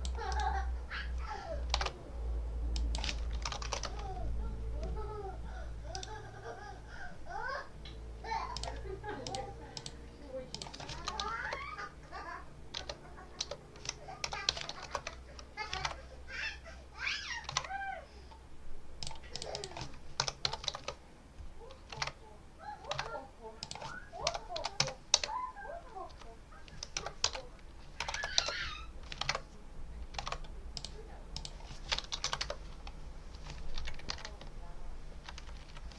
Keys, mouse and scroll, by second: 1.7 alt+Tab, 2.6 click, 3.2 1, 3.5 3, 3.6 Return, 5.8 right click, 8.4 click, 9.1 click, 9.6 click, 10.4 click, 10.8 1, 11.3 Return, 11.3-12.6 drag, 13.9-15.2 typing, 15.7 alt+Tab, 17.4 alt+Tab, 18.9 click, 19.2 click, 19.8-21.0 typing, 22.0 alt+Tab, 22.8 alt+Tab, 23.5 click, 23.9-25.1 typing, 26.0 Return, 26.8-28.6 typing, 29.2 alt+Tab, 30.1 alt+Tab, 30.6 click, 31.2 click, 32.0 BackSpace, 32.3 Return, 33.2 Return, 33.6 Right, 34.0 Left.